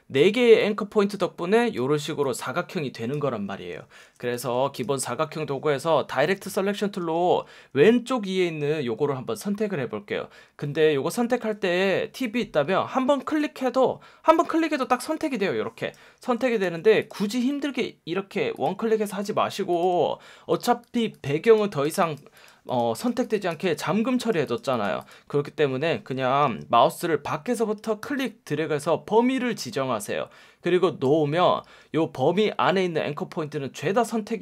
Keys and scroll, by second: 4.0 super+z, 7.0 F1, 11.1 F1, 16.6 super+z, 26.4 F1, 27.7 F1, 31.6 F1.